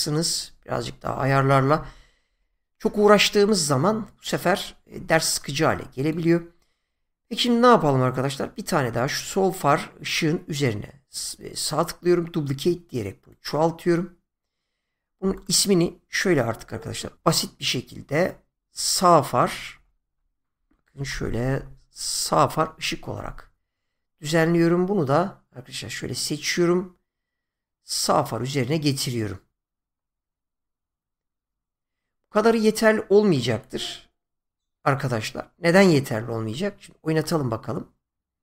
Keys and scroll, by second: 16.6 F2, 19.3 BackSpace, 21.1-21.5 typing, 22.3 Return.